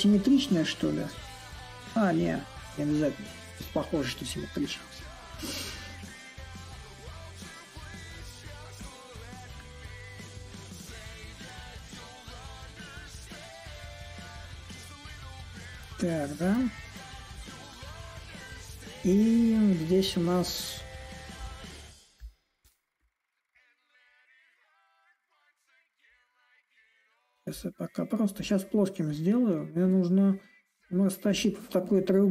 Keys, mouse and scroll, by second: 0.0-6.9 middle drag, 8.5-13.5 drag, 14.4-21.3 shift+drag, 21.9-26.9 drag, 27.3-32.3 drag.